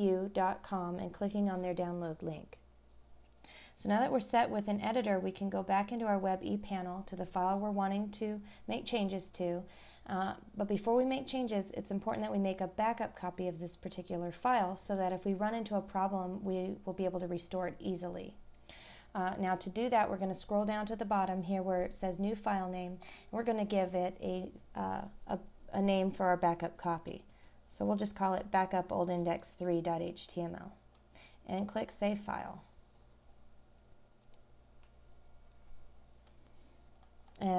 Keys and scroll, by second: 11.9 scroll down 1, 13.7-14.1 scroll down 1, 36.9-37.4 scroll down 1.